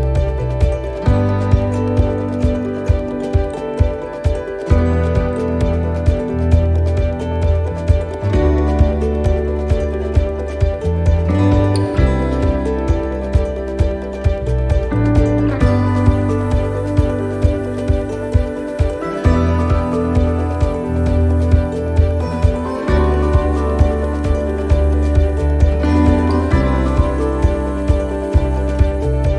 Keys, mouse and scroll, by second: 0.2 middle click, 0.5-1.1 scroll down 4, 1.2 shift+middle click, 1.6-1.9 scroll up 2, 2.0 shift+middle click, 2.5-3.3 scroll up 1, 3.6 shift+middle click, 4.3 middle click, 5.1 shift+middle click, 7.2 right click, 8.2 alt+shift+right click, 9.4 click, 11.7 middle click, 11.9-12.4 scroll down 3, 12.5 middle click, 14.8 ctrl+z, 15.3 middle click, 17.3 c, 19.8 middle click, 20.6 c, 22.1 middle click, 22.7 c, 24.2 middle click, 25.9 click, 27.6 middle click, 28.0-28.5 scroll up 1, 28.5 middle click.